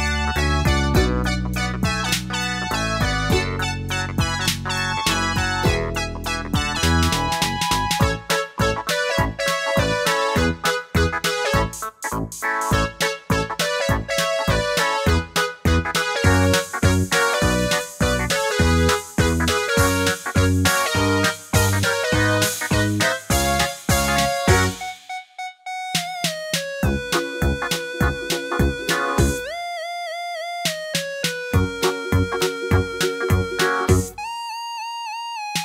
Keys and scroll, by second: 20.2 super+z, 33.6 super+d.